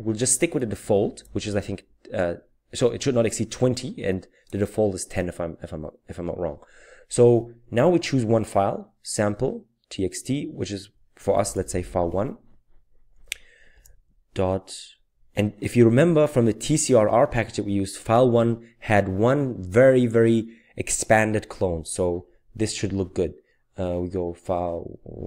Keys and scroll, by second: 11.3-12.5 typing, 13.7 typing.